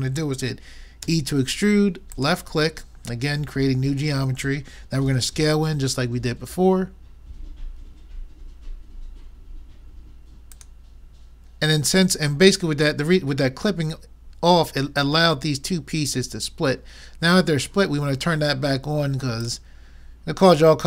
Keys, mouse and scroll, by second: 1.1 e, 5.1 s, 19.4-20.8 drag, 20.6 middle click, 20.6 right click.